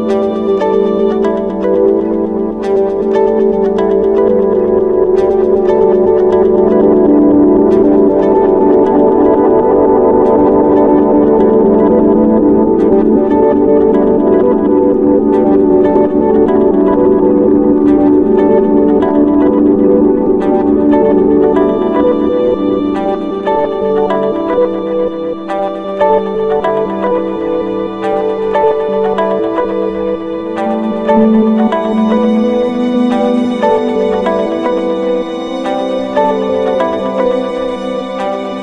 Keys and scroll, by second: 0.2 ctrl+space, 0.5 ctrl+=, 8.8 ctrl+0, 15.5 Return, 16.7 ctrl+0, 26.3 ctrl+=, 26.5 ctrl+space, 26.9 ctrl+=, 36.4 ctrl+-, 37.0 ctrl+0.